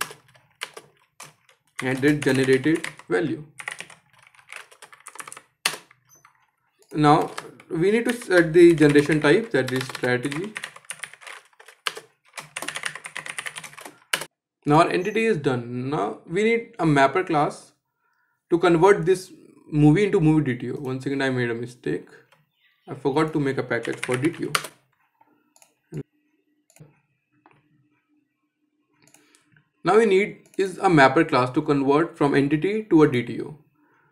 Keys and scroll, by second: 5.3 Return, 11.5 Return.